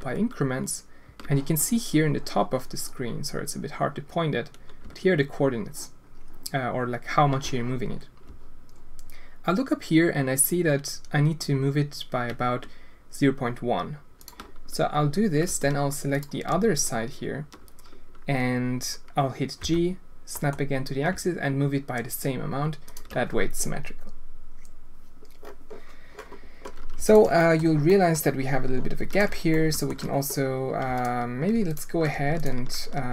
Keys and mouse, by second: 16.1 alt+click, 19.6 g, 27.4 click, 27.8 click, 28.0 click, 29.1 alt+click, 29.5-29.9 alt+shift+drag.